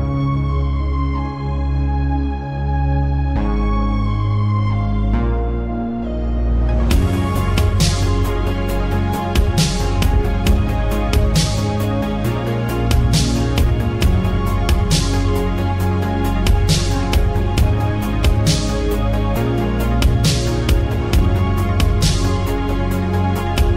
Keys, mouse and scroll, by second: 2.6-3.6 middle drag, 3.6-6.0 scroll up 1, 6.0-7.6 middle drag, 7.6 n, 10.3 click, 11.8-13.6 drag, 14.4 z, 16.7-17.7 drag, 17.7-18.3 scroll down 1, 18.3-19.8 middle drag, 19.8-23.7 drag.